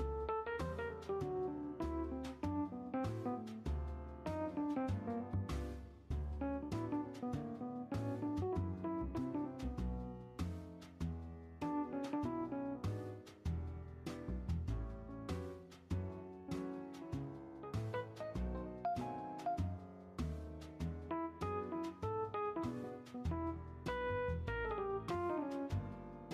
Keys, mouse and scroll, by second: 0.7-1.8 middle drag, 1.8-3.1 drag, 3.1 space, 4.3-4.9 middle drag, 4.9 shift+scroll up 1, 5.4 scroll down 2, 5.5-6.2 middle drag, 6.2-6.6 shift+scroll up 2, 7.5-7.8 drag, 7.8 space, 8.5-9.1 middle drag, 9.1-9.5 scroll down 1, 9.5 space, 9.8 shift+middle click, 10.6-10.9 drag, 10.9 scroll down 1, 11.0-11.4 middle drag, 11.4 space, 12.0-13.0 middle drag, 13.0 scroll up 1, 13.1 shift+space, 13.9-15.9 drag, 15.9-16.3 middle drag, 16.3-17.3 drag, 17.3 shift+middle drag, 17.6-18.3 scroll up 2, 18.3-19.4 drag, 21.8-22.3 middle drag, 22.3 shift+scroll up 1, 22.7-23.4 middle drag, 23.4 r.